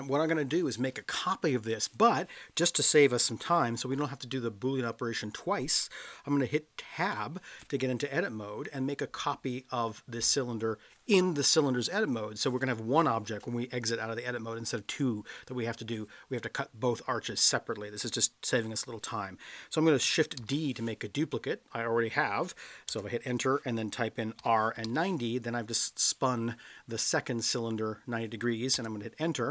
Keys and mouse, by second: 7.0 Tab, 20.4 shift+d, 22.8 Return, 24.4 r, 24.7 9, 24.8 0, 28.7 Return.